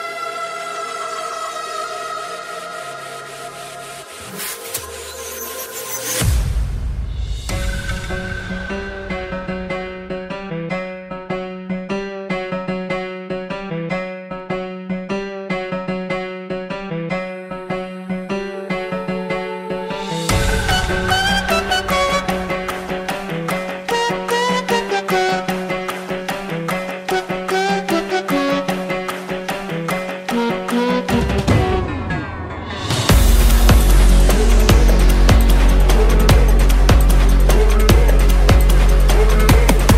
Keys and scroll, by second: 4.5 space, 8.5 ctrl+space, 9.0 1, 32.5 space, 33.0 space, 33.7 space.